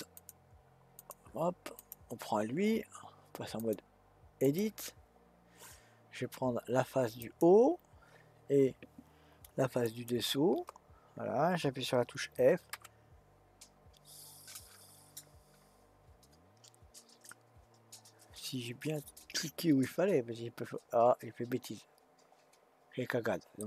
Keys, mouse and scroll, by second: 0.1-1.9 drag, 3.6-6.7 drag, 7.2 click, 9.8 shift+click, 12.7 f, 17.3-20.4 middle drag.